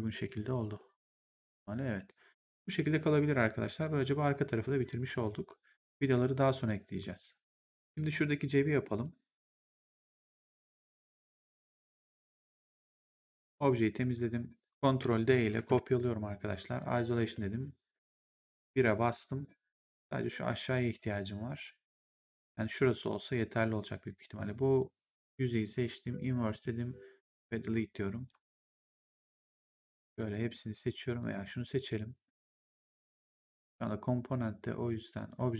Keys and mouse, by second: 1.8 right click, 2.2 click, 8.6 click, 11.1 click, 12.4 click, 15.4 ctrl+d, 16.6 ctrl+1, 17.1 1, 23.9 right click, 24.3 click, 26.4 click, 28.2 right click, 28.3 g, 29.7 click, 31.1 click, 33.4 click, 34.7 click.